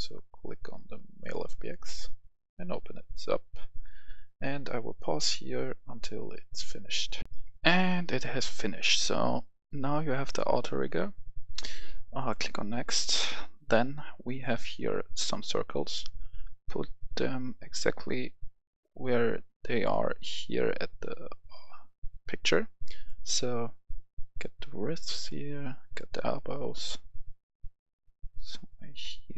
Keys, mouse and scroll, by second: 7.2 F10, 13.0-29.3 drag.